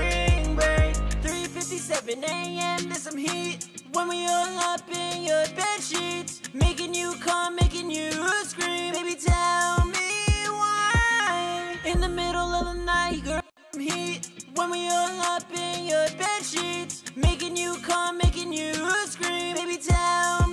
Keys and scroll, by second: 1.7-2.8 typing, 3.1 ctrl+super+w, 3.4 super+s, 3.9 super+Tab, 7.3 super+Tab, 8.5 super+`, 15.7 F4.